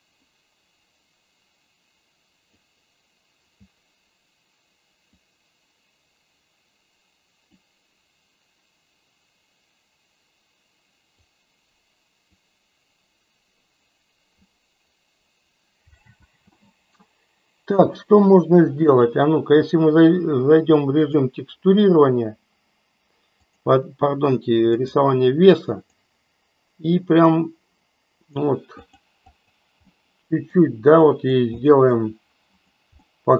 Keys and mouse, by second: 0.3-2.7 drag, 5.3-7.7 drag, 11.2-12.4 drag, 16.2 space, 16.9-17.9 middle drag, 18.8-21.2 drag, 23.4-24.9 drag, 25.9-28.3 drag, 28.7 click, 29.3 click, 29.9 middle click, 30.9 click, 31.5 middle click, 32.5 click, 32.9 middle click.